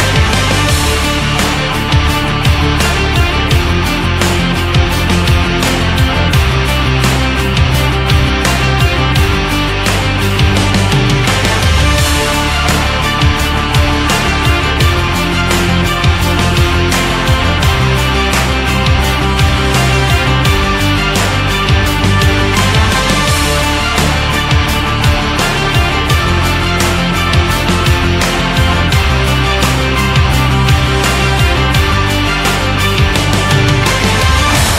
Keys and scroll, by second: 25.9 ctrl+z.